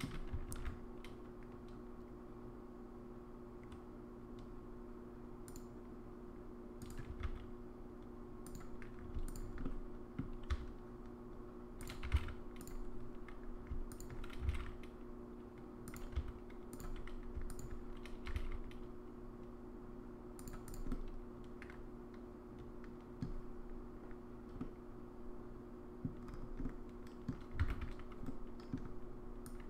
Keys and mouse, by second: 0.5 ctrl+r, 7.2 s, 9.3 alt+click, 9.6 middle click, 12.0 g, 14.4 g, 16.2 s, 17.5 alt+click, 18.3 g, 20.9-23.2 middle drag, 24.6-26.1 middle drag, 26.6 middle click, 27.7 alt+z, 28.3 middle click, 29.4 click.